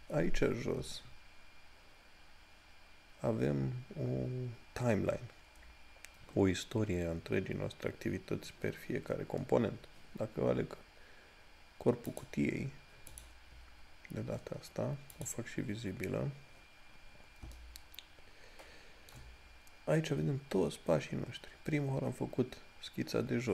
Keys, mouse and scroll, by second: 12.4 click, 17.8 shift+middle click.